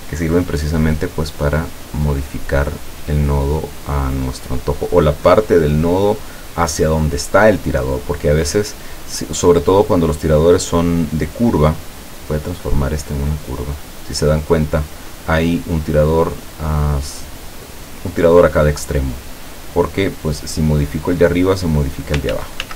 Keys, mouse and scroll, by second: 0.8-4.4 drag, 11.9 click, 13.4 click, 21.2-22.2 drag, 22.4 ctrl+z.